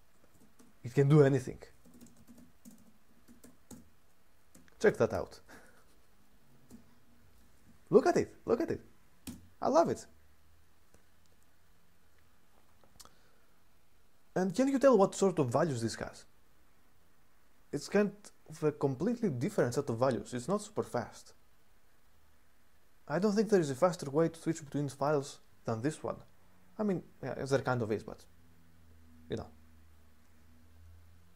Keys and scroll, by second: 0.0-4.8 typing, 6.4 typing, 8.9 typing.